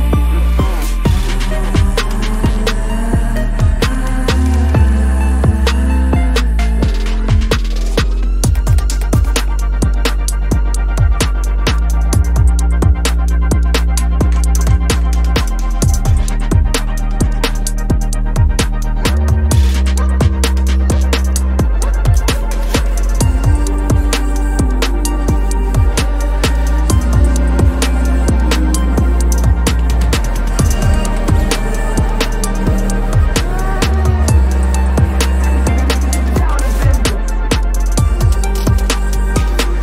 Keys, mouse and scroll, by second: 0.1-0.8 typing, 0.3-0.8 scroll down 1, 1.0 Return, 1.2 scroll down 1, 3.1 scroll up 1, 4.5 ctrl+-, 4.7 ctrl+-, 4.9 ctrl+-, 4.9 ctrl+-, 5.7 ctrl+-, 6.8 ctrl+=, 7.0 ctrl+=, 7.7 ctrl+=, 8.0 space, 8.9 ctrl+=, 9.2 space, 10.0 ctrl+-, 10.2 ctrl+-, 10.3 ctrl+-, 11.0 ctrl+-, 11.4 ctrl+=, 16.0 double click, 17.4 ctrl+j, 17.8 ctrl+j, 30.1 ctrl+m, 34.6 Return.